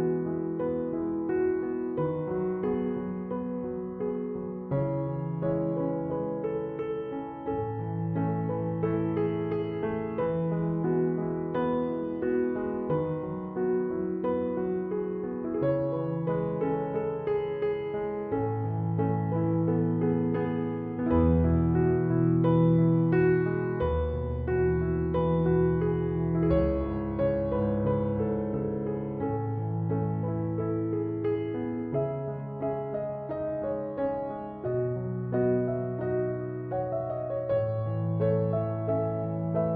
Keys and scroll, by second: 1.0-1.8 typing.